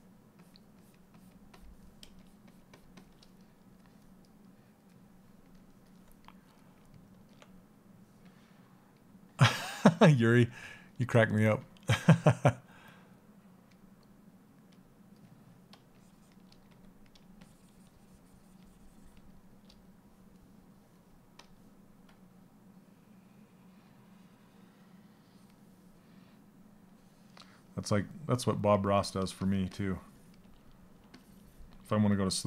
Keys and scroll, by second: 16.3 s.